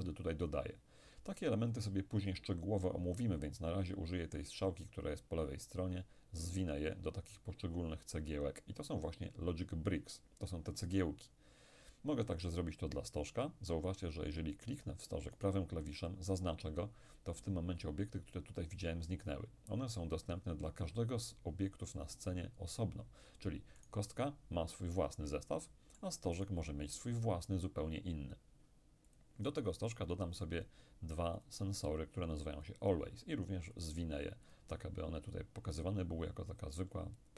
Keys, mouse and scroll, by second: 5.7 click, 6.9 click, 15.4 right click, 23.9-27.5 right drag, 24.7-27.5 middle drag, 29.1-32.5 drag, 32.6 click, 33.8 click.